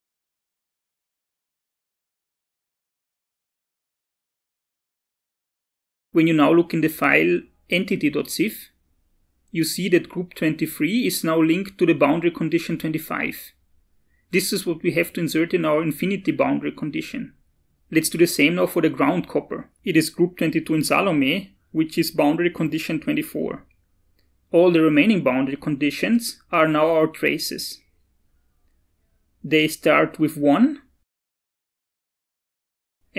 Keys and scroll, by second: 3.3 Down, 4.0 Up.